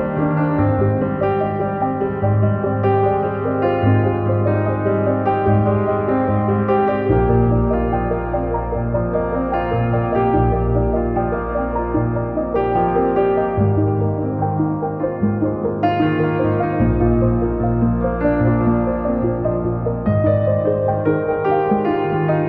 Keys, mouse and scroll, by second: 0.6 click, 1.4-4.8 drag, 7.1 Tab, 7.8 click, 9.5 3, 9.6 click, 10.9 ctrl+l, 12.4 click, 13.1 click, 14.6-16.7 drag, 17.2 Tab.